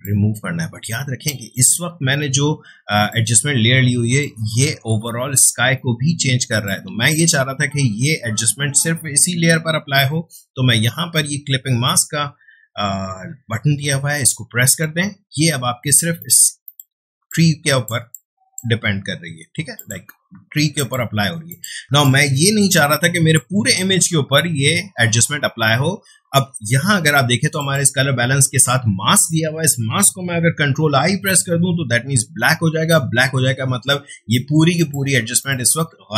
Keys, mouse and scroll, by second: 2.9 space, 3.1-9.1 ctrl+drag, 14.7 click, 16.9 space, 17.3-19.7 ctrl+drag, 21.8 space, 22.0-25.9 ctrl+drag, 27.5 click, 31.1 ctrl+i, 34.7 click.